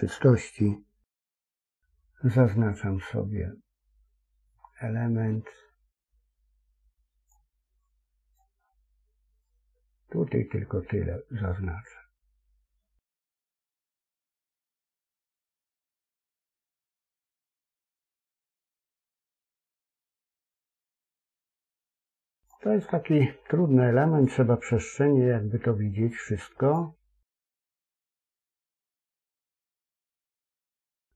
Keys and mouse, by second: 1.0 c.